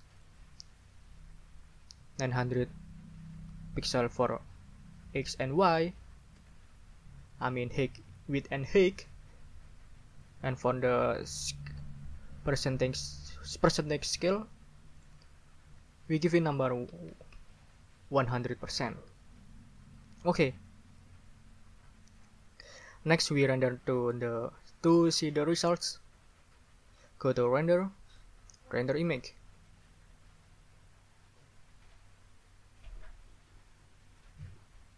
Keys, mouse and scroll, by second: 0.2 scroll up 2, 1.9-2.9 typing, 3.0 Tab, 4.0 9, 5.6 0, 6.4 Return, 15.0 scroll up 2, 16.2 ctrl+a, 16.6-17.6 typing, 18.7 Return, 28.1 middle click, 28.1 scroll up 2, 29.0 middle click, 29.0 scroll up 2.